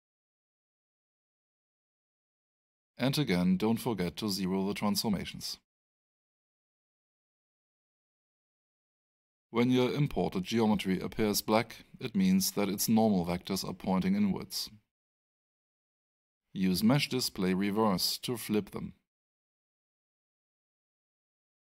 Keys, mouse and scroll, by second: 0.4 click, 4.8 click, 8.0 middle click, 9.0 right click, 10.3 alt+middle click, 11.2-12.8 scroll up 1, 12.8 click, 15.7 click, 18.8 click, 21.0 click.